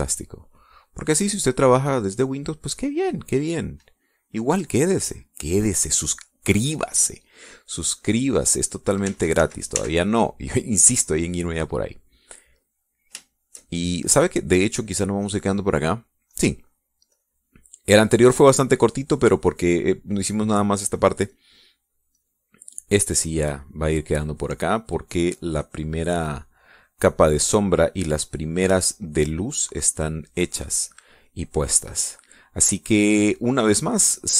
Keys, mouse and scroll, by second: 0.8-3.6 drag, 4.8 middle click, 5.9 middle click, 9.2-10.4 drag, 10.6 ctrl+z, 11.6 ctrl+middle click, 12.5 ctrl+middle click, 13.6 click, 14.6-15.6 shift+drag, 16.6 click, 17.7 click, 18.6 click, 19.2-20.9 drag, 23.0-29.1 drag, 29.3-31.6 drag, 31.9 middle click, 33.1 click.